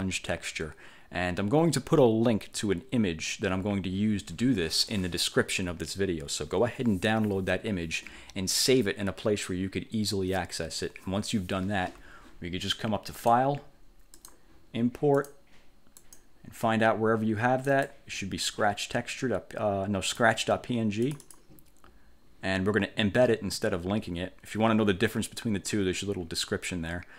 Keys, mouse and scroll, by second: 13.3 click, 14.3 click, 15.3 click, 16.1 click, 17.8 click, 20.2 click, 21.2 click.